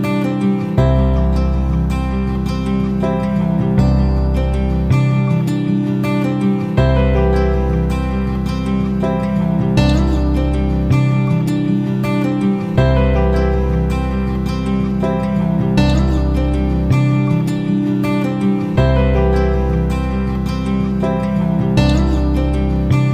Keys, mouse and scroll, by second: 0.7 click, 2.7 Down, 2.8 Down, 3.0 Down, 3.3 Down, 3.9 Down, 7.4 click, 8.3 F9, 9.3-22.0 drag.